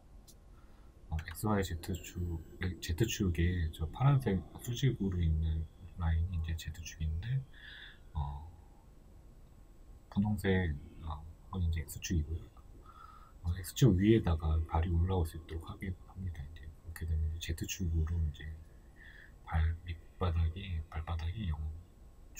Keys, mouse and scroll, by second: 0.1 g, 4.1 click, 4.7 g, 9.2-17.2 shift+middle drag, 15.4-16.3 scroll up 2, 16.3-17.2 scroll down 2, 17.2 right click, 21.1-21.8 drag, 21.8-22.3 shift+middle drag, 22.1-22.3 scroll up 2.